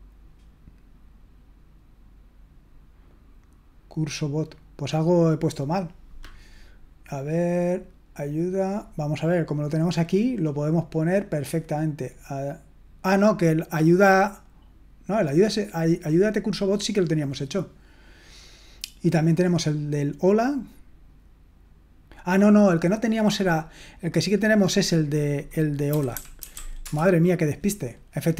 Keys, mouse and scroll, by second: 26.1-27.0 typing.